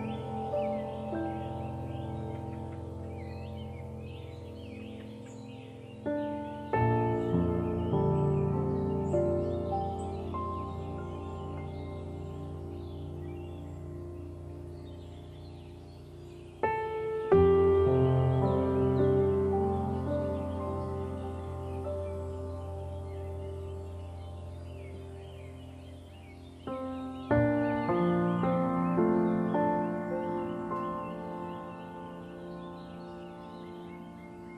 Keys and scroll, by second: 8.4 ctrl+0, 11.5 ctrl+g.